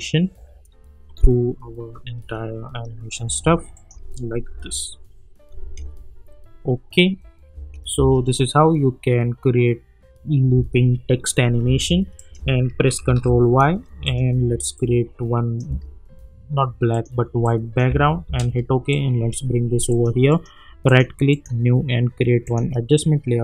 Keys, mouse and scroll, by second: 3.2 space, 3.7 click, 4.5 u, 5.6 space, 7.6 space, 11.6 space, 12.1 click, 13.0 ctrl+y, 14.0 click, 15.6 Return, 16.9 click, 17.9 Return, 18.9 click, 20.3 right click, 20.8 click.